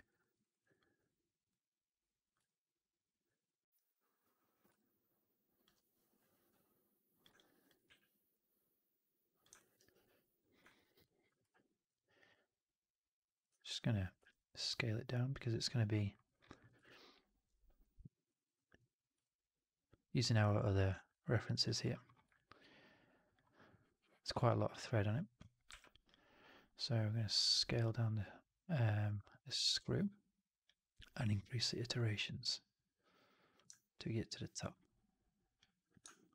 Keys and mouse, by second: 0.1 alt+middle drag, 0.3 right drag, 0.5 alt+right drag, 0.7 alt+click, 1.8 click, 2.4 alt+click, 4.7 alt+click, 6.8 click, 7.3-7.6 alt+drag, 7.7 w, 9.5 alt+middle click, 9.7 alt+right click, 9.9 alt+click, 10.6 middle click, 10.8 alt+right click, 12.3-13.3 middle drag, 13.4 1, 14.1 r, 29.0-33.6 drag, 33.8 alt+click, 36.0-36.3 shift+drag.